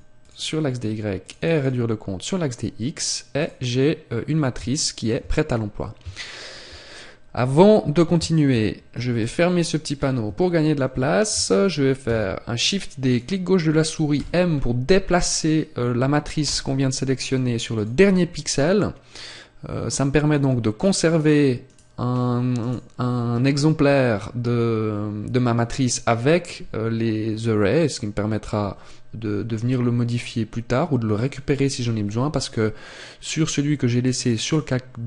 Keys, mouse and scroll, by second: 3.3 click, 4.7 shift+middle click, 5.5 scroll up 1, 6.1 shift+middle click, 9.9-10.6 scroll down 2, 10.3 shift+middle click, 12.0 shift+d, 13.1 click, 14.1 m, 19.8 click, 20.7 right click, 21.9 right click, 33.3 click, 34.4 right click.